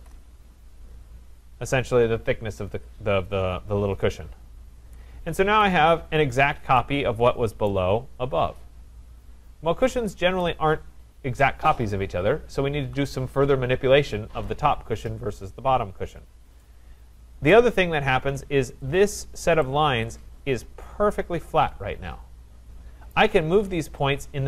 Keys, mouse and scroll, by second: 0.0 Return, 2.7 Return, 4.1 click, 5.6 right click, 5.8-6.8 scroll, 6.8-7.2 scroll, 7.7 right click, 8.0-9.1 scroll, 9.1-9.9 scroll, 10.4 right click, 16.1 middle click, 16.1 middle click, 16.2 middle click, 16.6 middle click, 17.5 right click, 17.7-18.8 scroll, 18.8 scroll, 18.9 click, 23.1 right click.